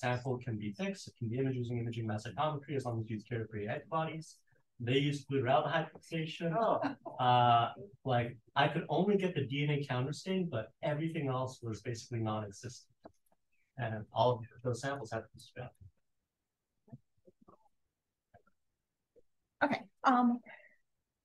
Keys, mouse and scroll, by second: 5.7-6.5 scroll up 1, 6.5-7.2 scroll up 1, 7.2-8.0 scroll up 1, 8.0-10.1 scroll up 1, 10.1-11.1 scroll up 1, 11.1-12.2 scroll up 1, 12.2-13.2 scroll down 1, 13.2-14.0 scroll down 1, 13.6-14.0 drag, 14.5-14.9 drag, 15.3-15.7 drag, 18.7 click.